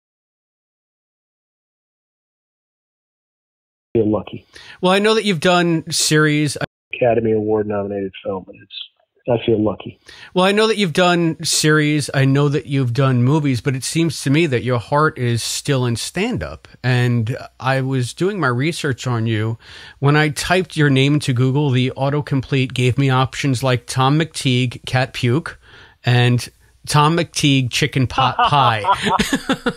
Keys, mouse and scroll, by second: 0.2 click, 1.3-3.3 drag, 3.7 click, 3.9 space, 5.2 click, 5.7 click, 6.5 space, 6.7 click, 6.8 space, 7.6 click, 8.4-10.4 drag, 11.5 click, 12.5 click, 13.1 ctrl+s.